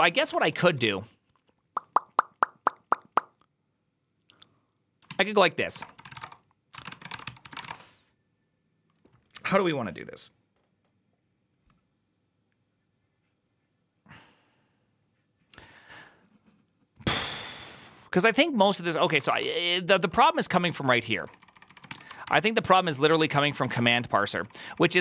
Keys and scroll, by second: 0.0-1.1 typing, 5.2-8.0 typing, 18.9-25.0 typing.